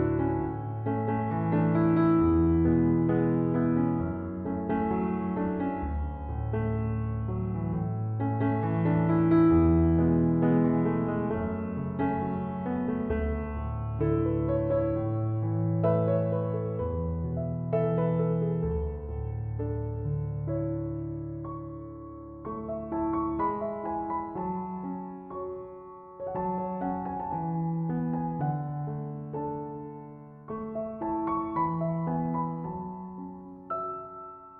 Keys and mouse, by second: 1.0 click, 3.6 click, 15.9 click, 22.3 click.